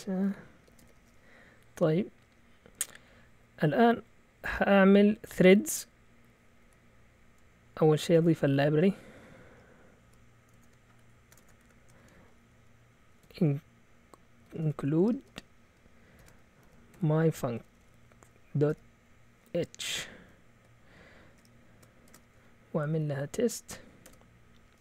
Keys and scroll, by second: 0.0-1.4 typing, 3.0 Down, 3.0-3.8 typing, 3.6 Up, 5.3 Down, 5.3 typing, 6.6 typing, 8.0-8.7 typing, 10.0-18.7 typing, 19.9 typing, 21.8-22.7 typing, 22.7 Down, 22.9 Down, 24.0 Tab.